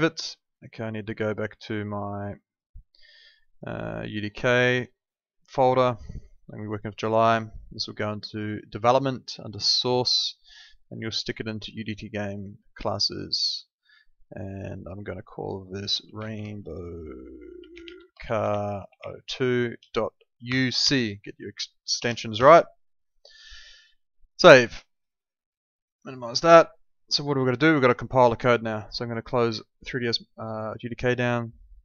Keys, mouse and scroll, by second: 15.9-20.8 typing, 21.9 BackSpace, 22.3 c, 24.2 click, 29.0 click.